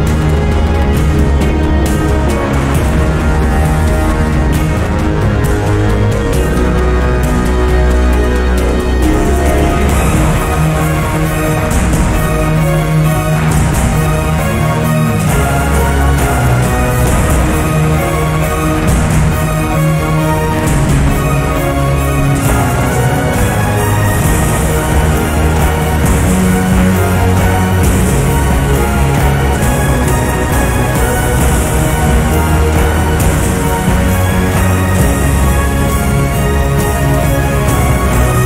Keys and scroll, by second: 1.6 o, 1.8 k, 2.0 Return, 2.9-4.3 typing.